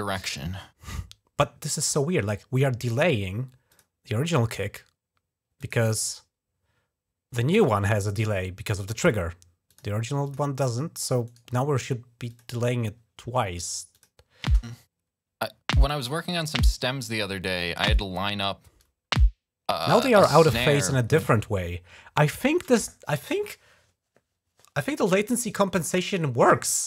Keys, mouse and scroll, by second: 3.5 click, 5.4 click, 5.6 right click, 7.3 click, 9.5 click, 10.0 click, 11.1 right click, 12.1 click, 13.7 click, 14.2 space, 19.7 space, 20.3 click, 25.7 click, 26.3 click.